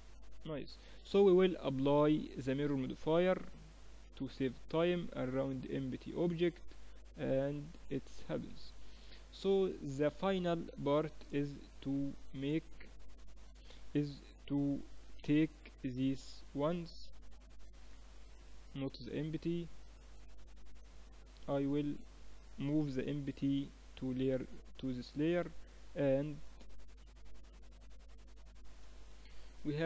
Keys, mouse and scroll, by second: 0.4-2.7 drag, 4.6-6.4 drag, 6.4-10.0 middle drag, 8.2 ctrl+s, 10.0 KP_3, 11.2 middle click, 11.9 z, 12.5 a, 12.8 a, 13.2 a, 14.8 b, 17.8 click, 18.0-19.8 right drag, 19.4-22.6 drag, 20.4 ctrl+z, 21.1-22.9 right drag, 22.6 m, 25.2 z, 27.8-29.5 middle drag.